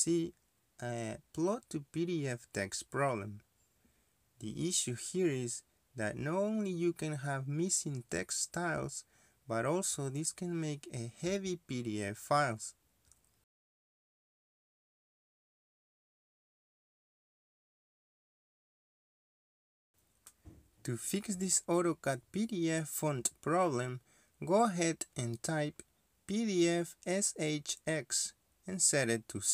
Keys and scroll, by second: 21.3 ctrl+Escape, 21.5 ctrl+Escape, 21.6 ctrl+Escape, 21.8-22.7 typing, 24.0 d, 27.9-28.7 typing.